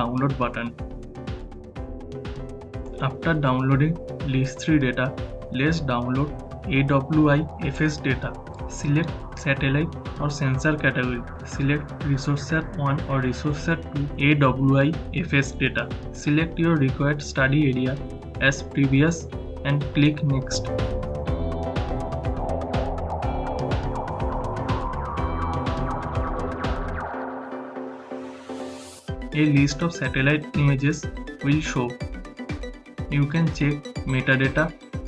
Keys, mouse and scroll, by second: 4.7 click, 4.7 click, 8.2 click, 8.4 click, 11.8 click, 18.1 shift+h, 18.6 shift+h, 18.7-27.0 drag, 28.5 click, 34.1 click.